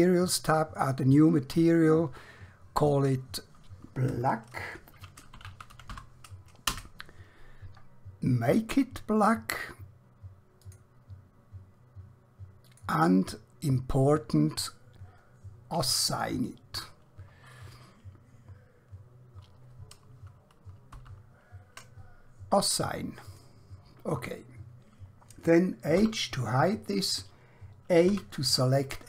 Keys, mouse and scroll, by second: 4.9-5.9 typing, 6.8 Return, 8.5 click, 20.1 ctrl+Num_Lock, 20.9 ctrl+z, 23.3 click, 26.0 h, 28.1 a.